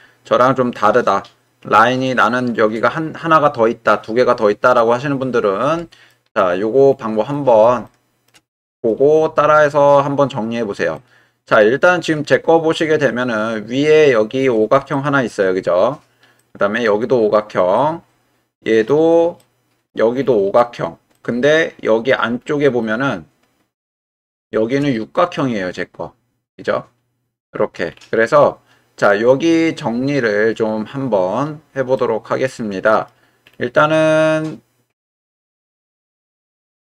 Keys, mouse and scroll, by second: 1.0 right click, 1.6-6.1 drag, 7.3 middle click, 7.8 shift+middle click, 8.6 middle click, 10.9-13.9 middle drag, 14.9 shift+middle click, 16.4 middle click, 17.8-18.9 middle drag, 19.4 middle click, 21.1 middle click, 22.8-24.0 right drag, 24.3 shift+right click, 24.9 right click, 31.9-33.1 right drag, 33.9-36.8 middle drag.